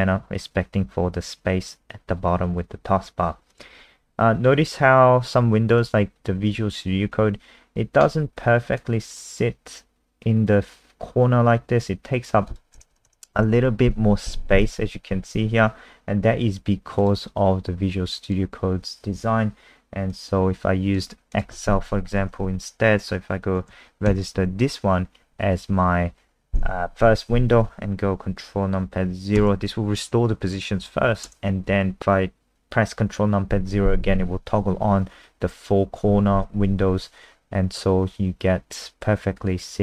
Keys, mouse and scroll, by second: 3.5 click, 13.1 ctrl+KP_0, 13.4 ctrl+KP_0, 14.6 click, 24.1 super+KP_1, 25.8 Escape, 29.4 ctrl+KP_0.